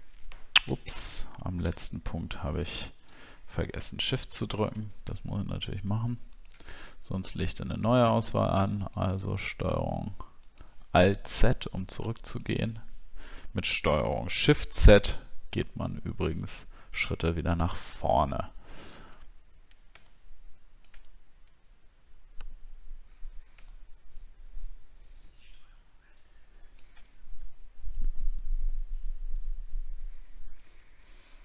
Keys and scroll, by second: 0.9 ctrl+alt+z, 3.3 alt+scroll up 1, 18.3 alt+scroll down 1, 31.1 alt+scroll down 1.